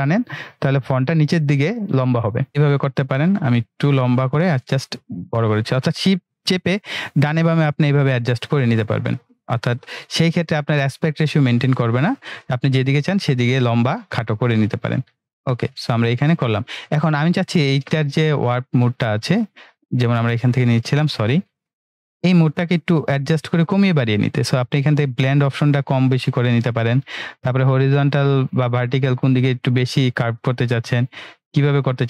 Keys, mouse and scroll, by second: 7.4-9.2 shift+click, 12.3-16.7 drag, 24.5-26.7 drag.